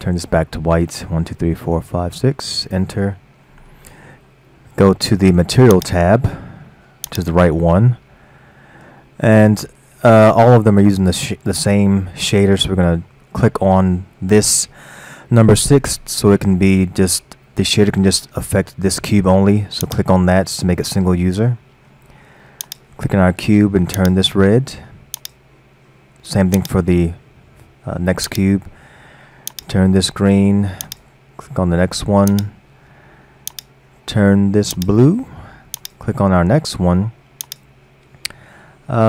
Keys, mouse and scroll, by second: 1.3 f, 1.7 f, 2.1 f, 3.5-5.0 middle drag, 5.0-5.5 scroll down 2, 5.8 click, 7.1 click, 9.9-12.9 middle drag, 19.9 click, 22.7 click, 25.2 click, 26.6-27.2 drag, 28.3 click, 30.9 click, 32.3-32.7 drag, 33.5 click, 35.8 click, 37.5 click.